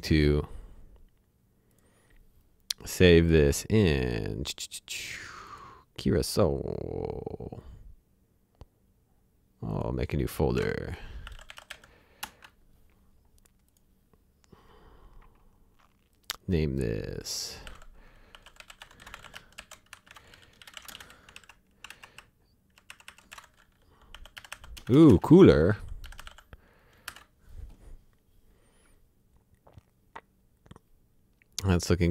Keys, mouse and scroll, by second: 1.7 click, 3.5-5.5 scroll up 1, 5.5 click, 9.7 click, 10.5-12.2 typing, 12.2 Return, 14.1 click, 16.1 click, 17.6-21.1 typing, 21.3 ctrl+Left, 21.9 ctrl+Right, 22.1 Left, 23.3-26.7 typing.